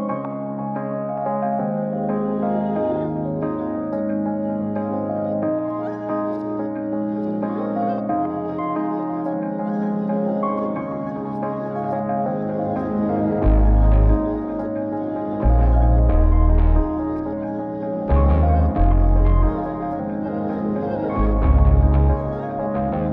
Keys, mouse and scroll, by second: 1.0-12.4 drag, 13.7 click, 17.4 click, 18.5-22.6 drag, 18.5 right click, 22.6-23.1 right drag.